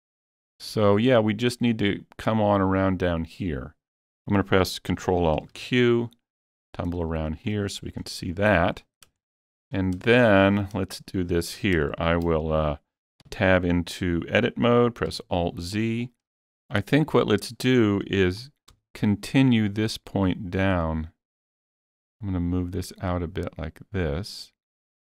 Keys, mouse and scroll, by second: 0.1-3.2 shift+middle drag, 4.5-8.1 shift+middle drag, 4.5 scroll up 1, 5.4 ctrl+alt+q, 8.0 scroll up 4, 8.5 shift+middle click, 9.3 shift+middle click, 9.8 scroll up 1, 10.5 scroll up 3, 10.9 shift+middle click, 12.0 shift+middle click, 13.3 Tab, 15.1 alt+z, 16.0 scroll up 2, 16.4 shift+middle click, 16.7 click, 18.7 g.